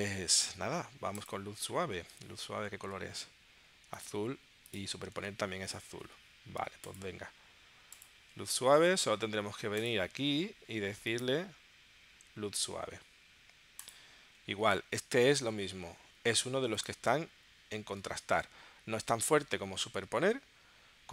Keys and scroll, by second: 2.2 super+Tab, 5.2 super+Tab.